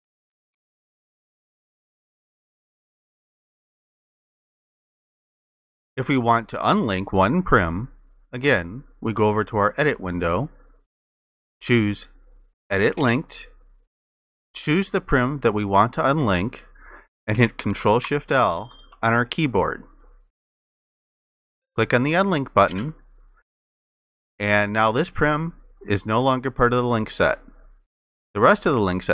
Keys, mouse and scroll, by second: 18.1 ctrl+shift+i.